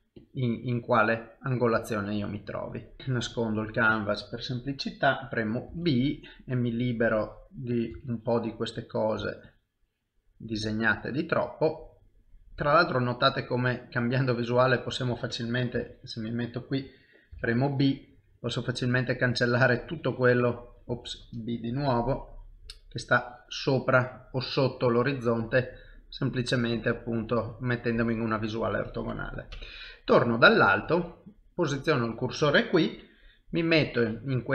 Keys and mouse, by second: 1.0 middle click, 2.9 shift+middle click, 3.0 click, 3.7 middle click, 5.7 b, 7.1 click, 7.9 b, 11.3 middle click, 12.6 b, 14.2 middle click, 15.7 KP_1, 17.3 b, 20.0 click, 20.9 ctrl+z, 22.6 b, 24.8 middle click, 27.0 shift+middle click, 27.6 middle click, 29.5 KP_7, 31.7 shift+right click, 33.6 middle click.